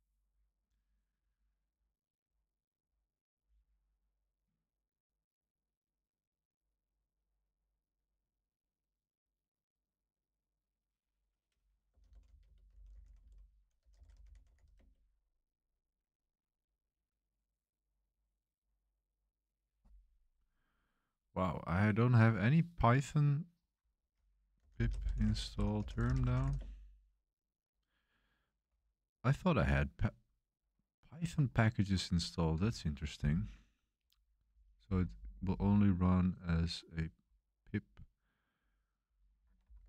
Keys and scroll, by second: 11.6-15.0 typing, 24.3-26.9 typing, 32.6 super+1.